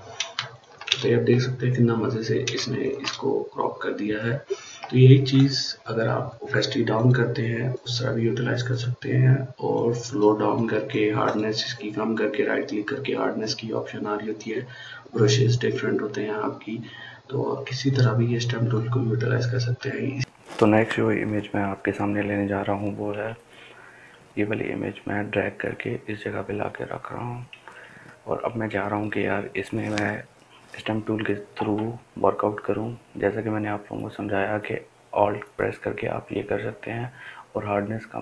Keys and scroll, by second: 0.2 ctrl+space.